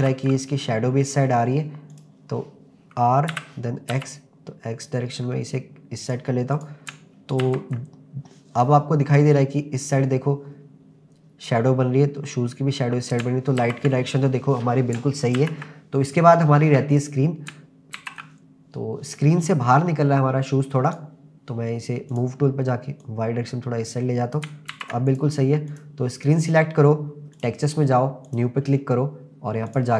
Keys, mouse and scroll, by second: 0.0 ctrl+s, 3.0 click, 3.3 r, 3.9 x, 6.0 click, 6.5 click, 7.4 ctrl+s, 13.6 ctrl+s, 14.5-15.0 scroll down 1, 15.4 ctrl+s, 16.9 click, 18.0 ctrl+s, 20.9 click, 22.1 click, 23.0 click, 24.8 ctrl+s, 25.1 click, 25.7 click, 27.4 click, 28.3 click, 29.7-29.9 drag.